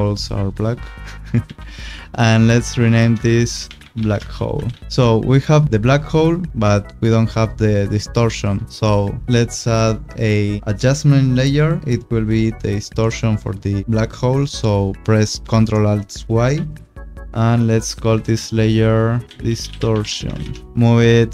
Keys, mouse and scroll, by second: 1.4 v, 2.6 click, 3.3 Return, 3.6-5.0 typing, 4.8 click, 8.3 click, 10.6 u, 16.5 ctrl+alt+y, 17.2 ctrl+alt+y, 17.6 click, 18.5 Return, 19.2-20.6 typing, 21.2 click.